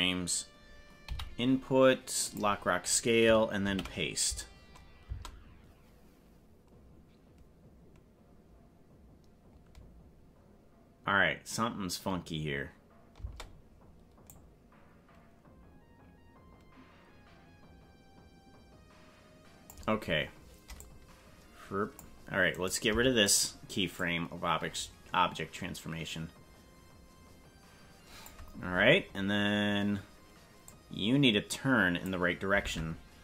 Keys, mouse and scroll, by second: 1.0 i, 3.6 ctrl+v, 5.0 space, 13.3 space, 14.3-19.8 drag, 20.8-22.0 drag, 22.5 right click, 22.8 Delete, 24.0-28.4 drag, 30.7-32.1 drag, 32.7 ctrl+Tab.